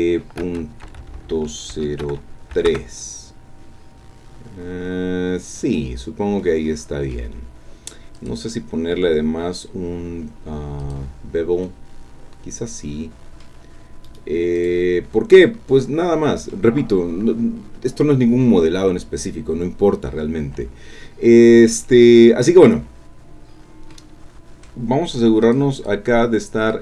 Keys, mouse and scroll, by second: 0.8 Right, 1.0 Left, 1.7 Delete, 2.6 KP_3, 2.7 KP_Enter, 4.0-4.4 scroll up 2, 4.4 scroll down 2, 6.4 click, 8.2 click, 10.8 click, 11.6-12.9 middle drag, 12.9 click, 14.0 right click, 14.6 click, 15.4-16.7 drag, 21.2-21.5 scroll down 1, 21.7-22.9 drag, 23.5-23.9 scroll down 2, 23.9 click, 25.4 click, 25.8 click, 26.7 click.